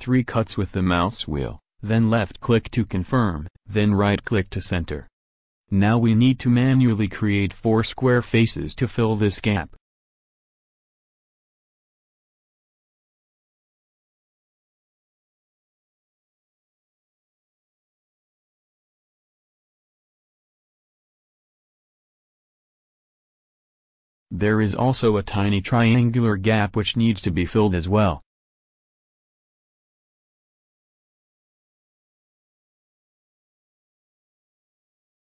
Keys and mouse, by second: 2.1 a, 9.7 f, 10.1 a, 13.3 a, 15.8 f, 16.2 a, 19.3 f, 20.0 a, 21.2-22.1 middle drag, 22.2 middle click, 22.4 middle click, 23.8 middle click, 24.0 middle click, 25.3-29.8 middle drag, 29.8-30.8 right drag, 30.8 f, 31.3 a.